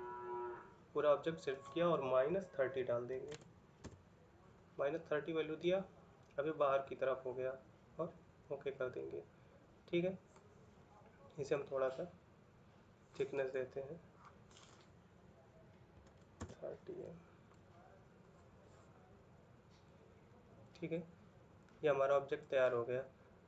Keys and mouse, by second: 3.7 Return, 3.7 typing, 9.1 middle click, 11.7 middle click, 16.2 Return, 16.2 typing, 16.7 middle click, 20.1 middle click, 21.9 middle click, 23.0 middle click.